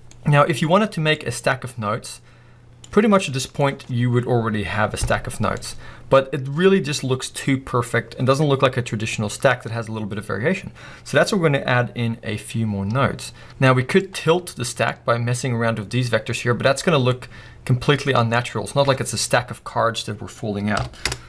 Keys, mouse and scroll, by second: 1.5 click, 3.1-3.6 middle drag, 3.6 scroll up 1, 5.5 scroll down 1, 5.6 middle click, 6.3 scroll up 1, 15.8 click, 21.1 Return.